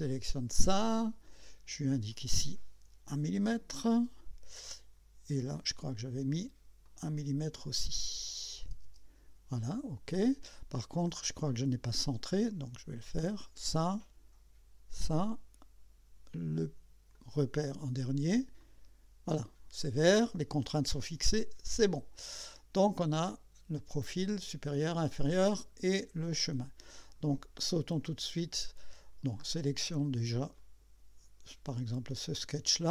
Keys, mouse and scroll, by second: 0.1 click, 2.1 click, 3.1 1, 4.0 Return, 5.4 click, 6.8 click, 7.2-8.7 middle drag, 8.6 1, 8.9 Return, 10.8-11.1 scroll up 2, 11.5 right click, 13.4 click, 14.9 click, 17.2 click, 18.6 click, 21.1 click, 21.9 scroll down 1, 22.5 scroll up 1, 22.9-24.5 drag, 25.2-25.9 drag, 30.6 click, 32.5 click.